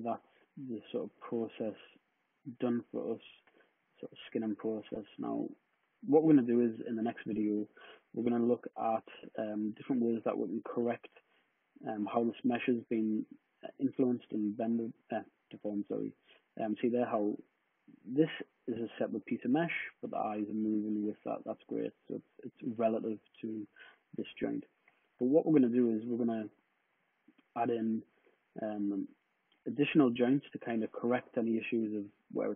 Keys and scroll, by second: 0.9 e, 4.6 super+z, 12.2 super+z, 23.4 super+z, 23.8 super+z, 24.6 super+z.